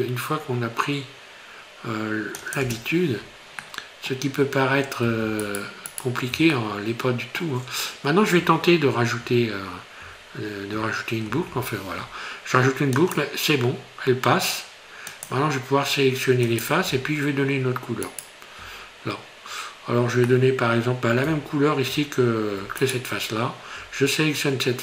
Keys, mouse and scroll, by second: 3.6 middle click, 5.4 alt+shift+right click, 5.9 alt+shift+right click, 6.6 middle click, 11.3 ctrl+r, 16.5 click, 18.1 alt+right click, 18.8 scroll down 2, 20.3 middle click, 22.8 shift+right click.